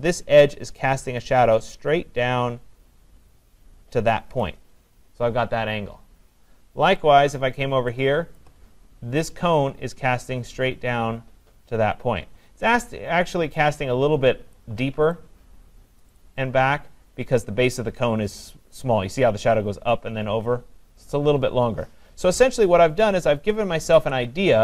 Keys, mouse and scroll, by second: 4.4-7.5 click, 7.4 click, 7.6 click, 7.8 click, 7.9 click, 8.4 click, 9.1 click, 14.5 click, 16.0 click, 16.2 click, 17.4 click, 22.7 click, 23.4 ctrl+-, 23.8 ctrl+-.